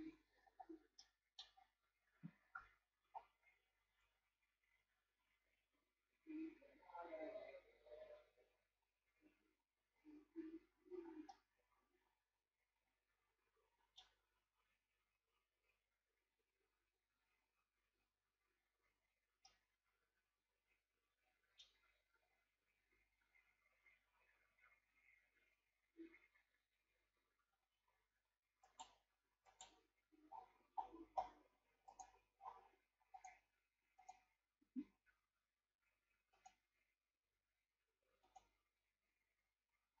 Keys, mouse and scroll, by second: 1.0 middle click, 1.6 scroll up 4, 3.8 ctrl+scroll up 1, 11.3-14.5 middle drag, 19.4-23.1 middle drag, 27.5-27.8 scroll down 4, 28.6 right click, 29.5 right click, 30.4-31.6 scroll down 13, 34.0 click.